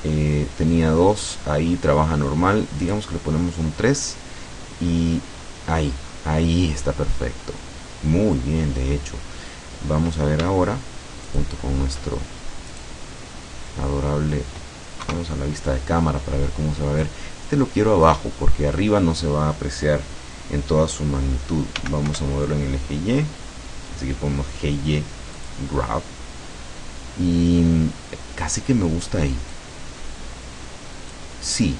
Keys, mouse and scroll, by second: 1.1-1.4 scroll up 2, 1.4 scroll down 2, 1.7-2.0 scroll up 2, 2.9 click, 5.1-7.3 scroll down 2, 7.9-8.4 scroll down 2, 11.3 shift+click, 12.8 right click, 14.3 middle click, 15.1 KP_0, 17.1-18.3 drag, 21.9 g, 22.1 y, 25.5 click, 29.6-31.4 drag.